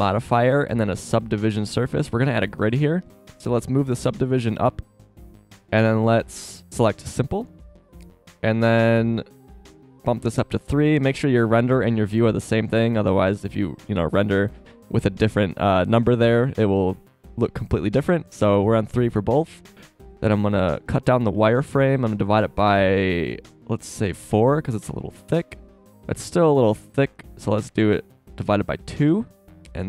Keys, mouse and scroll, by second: 14.5 KP_0.